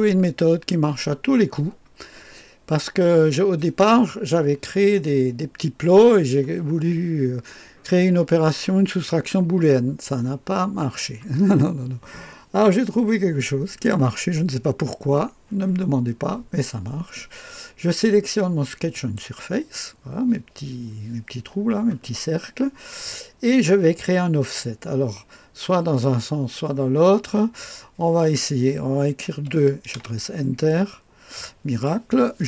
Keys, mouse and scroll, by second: 1.3-1.9 scroll down 1, 18.9 click, 27.0 click, 29.3 KP_2, 29.9 Return.